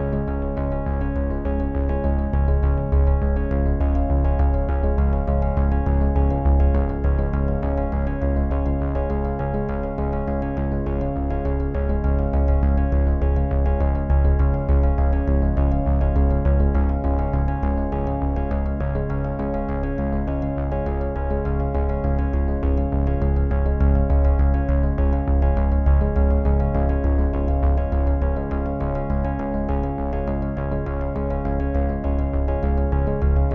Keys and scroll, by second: 1.5 ctrl+p, 20.1 ctrl+F5.